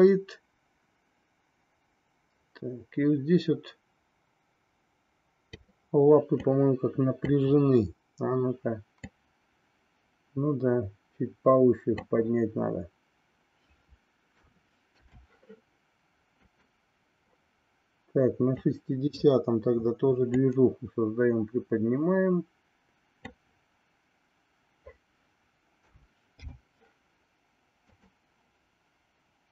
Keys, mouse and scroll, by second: 6.3-7.3 drag, 9.1-12.1 drag, 14.3 a, 15.1 i, 16.5 click, 18.6 click, 20.2-23.4 drag, 26.0 a, 26.5 i, 27.8 click.